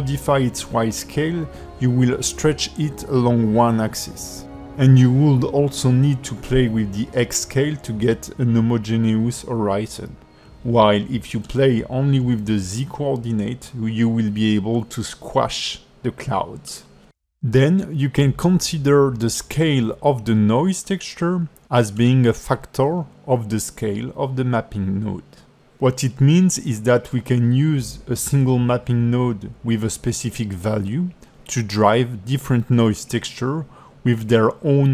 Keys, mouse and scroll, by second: 3.0 click, 6.0 middle click, 7.9 click, 12.6-12.9 scroll down 3, 13.1 middle click, 19.9 click, 21.3 click, 25.2 alt+middle click, 28.3 click, 30.5 middle click.